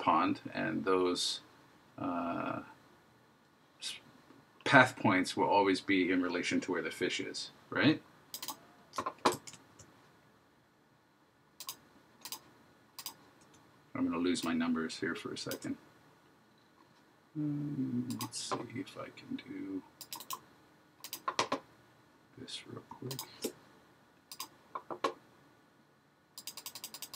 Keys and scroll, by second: 9.5 super+z.